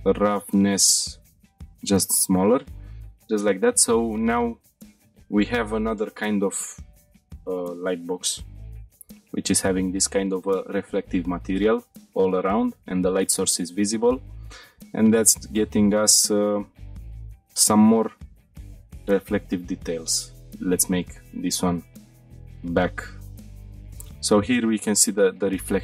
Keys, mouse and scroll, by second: 2.5 shift+middle click, 3.0 middle click, 12.2-12.7 shift+middle drag, 13.6-14.1 shift+middle drag, 14.4-14.9 middle drag, 15.0-15.7 shift+middle drag, 16.3-16.9 middle drag, 17.0 scroll up 4, 17.1-17.5 shift+middle drag, 17.6-18.0 middle drag, 18.5 scroll up 1, 18.8-19.3 middle drag, 19.6 click, 21.2-22.5 drag, 23.4 shift+middle click, 24.5 scroll down 1.